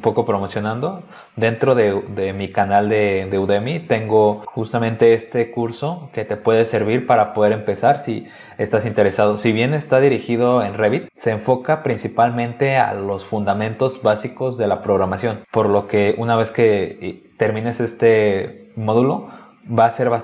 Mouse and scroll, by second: 0.7 scroll down 2, 1.1 scroll up 2, 3.5-3.8 scroll down 2, 4.4-19.8 scroll down 2, 19.8-20.2 scroll up 2.